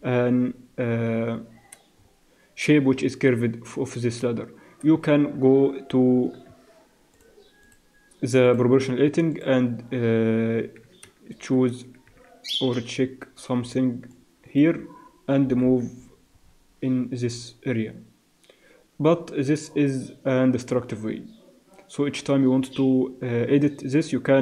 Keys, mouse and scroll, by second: 3.2-5.4 drag, 5.4 Tab, 6.2 Tab, 6.5 Tab, 7.1-9.7 drag, 11.6 shift+z, 12.2 z, 12.7 a, 13.6 b, 15.4 g.